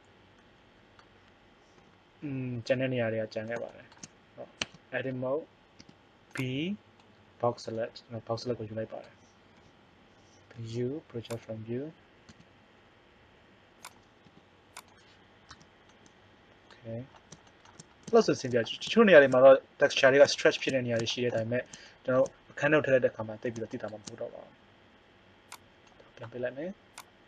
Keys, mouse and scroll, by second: 1.8 KP_7, 4.6 Tab, 5.8 b, 9.5 KP_7, 10.5 u, 12.2 s, 14.3 g, 15.5 Tab, 16.0 middle click, 25.5 click.